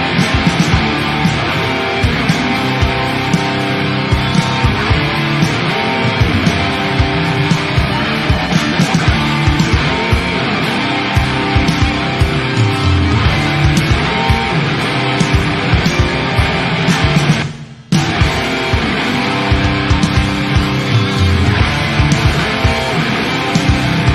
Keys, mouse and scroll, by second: 0.1-1.7 middle drag, 1.7-2.6 drag, 2.6 ctrl+z, 4.0-7.1 drag, 7.1-8.3 middle drag, 8.3-11.3 drag, 11.3-14.0 middle drag, 14.0 shift+d, 14.6 click, 15.2-15.9 middle drag, 15.9 click, 17.2-18.6 middle drag, 18.6 click, 19.6 middle click, 20.5-22.3 drag, 22.3-24.1 middle drag.